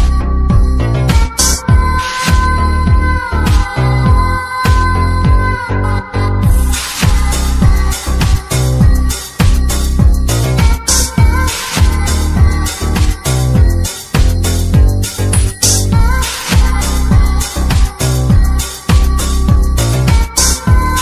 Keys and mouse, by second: 4.8 typing, 10.2 space.